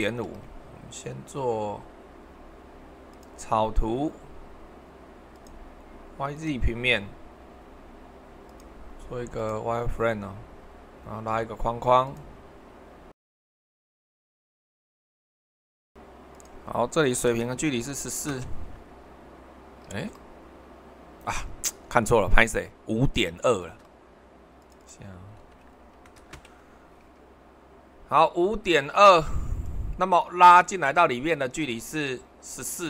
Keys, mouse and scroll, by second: 0.0 super+2, 12.0-13.1 drag, 13.3-15.2 drag, 15.6 Escape, 17.2 h, 17.8 1, 18.0 4, 18.3 Return, 19.9 super+1, 23.6 super+2, 25.4 5, 26.0 ., 26.2 2, 29.0-30.7 drag, 31.7 super+1.